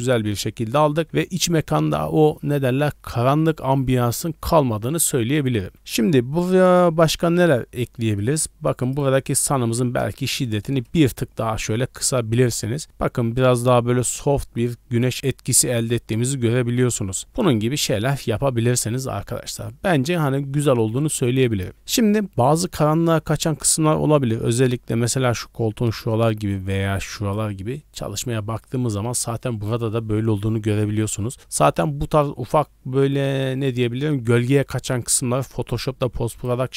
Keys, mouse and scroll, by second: 1.0 scroll down 3, 6.1 scroll up 1, 8.8-10.9 drag, 14.8 scroll up 1, 24.8 d, 25.4 click, 25.9-26.7 d, 26.7 click, 27.3 d, 28.4 middle click, 34.9 d, 35.0-36.5 drag, 35.0 right click.